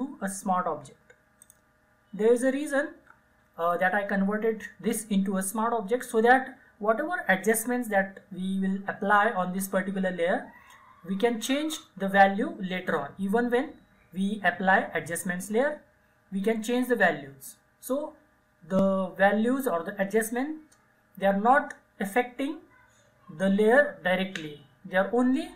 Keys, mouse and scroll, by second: 1.5 click.